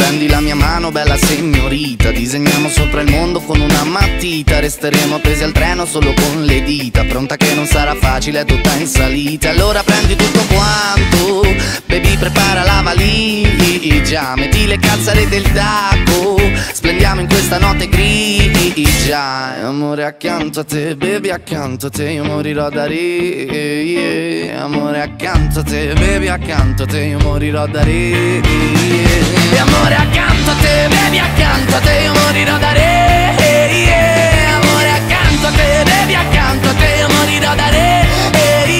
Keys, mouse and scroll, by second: 0.5 e, 2.4 e, 3.6 s, 4.6 e, 5.8 i, 6.9 e, 7.8 middle click, 8.4 e, 9.8 s, 10.6 e, 11.6-13.0 middle drag, 13.0 Tab, 13.3-13.6 drag, 13.7 click, 14.0 click, 15.6-16.4 drag, 16.4 shift+middle click, 16.6 click, 16.9-17.5 shift+middle drag, 17.5 click, 18.9 a, 19.7 a, 20.0 s, 20.6 g, 21.8 right click, 22.7 right click, 23.2 ctrl+KP_Add, 23.4 ctrl+KP_Add, 24.9 a, 25.2 g, 27.6 right click, 27.9 right click, 28.2 middle click, 28.9 ctrl+r, 30.4 a, 30.5 g, 33.0 right click, 33.3 middle click, 33.8-34.1 scroll down 2, 34.1 middle click, 34.5-35.8 right drag, 35.8 i, 36.8 e, 37.5 s, 38.5 middle click.